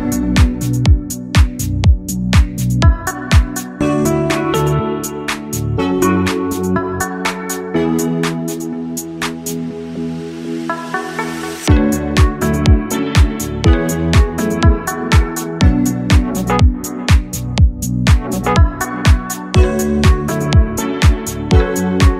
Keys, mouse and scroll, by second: 1.7-3.4 middle drag, 4.0 Tab, 4.4 click, 4.8-6.7 middle drag, 6.7-7.4 scroll down 3, 7.1-10.8 middle drag, 10.8 scroll down 1, 11.1-11.8 shift+middle drag, 11.9-14.0 middle drag, 17.0 click, 18.6 click, 19.4 click, 20.2-21.1 drag.